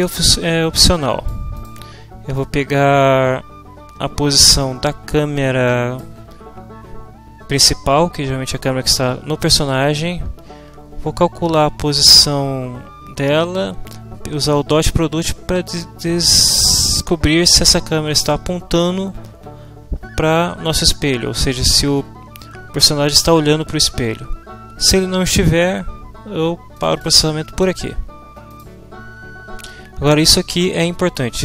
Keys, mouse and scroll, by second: 2.4-6.2 drag, 26.8 click, 28.4 click.